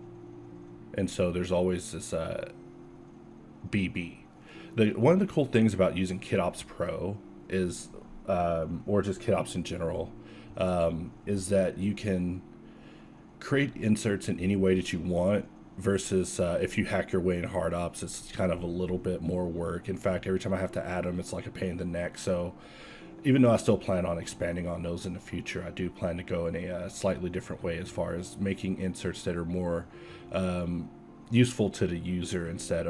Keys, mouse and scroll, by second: 1.5 Tab, 2.8 ctrl+KP_Add, 3.2 f, 4.0 Tab, 4.7 Tab, 6.3 z, 6.7 KP_1, 8.6 g, 10.1 Tab, 10.4 z, 11.9 KP_Divide, 13.5 a, 16.7 ctrl+KP_Subtract, 18.3 a, 18.9 alt+a, 21.4 shift+z, 26.0 z, 26.4 z, 27.0 alt+a, 29.1 KP_7, 29.4 KP_5, 30.0 Tab, 30.8 ctrl+Tab, 32.2 z.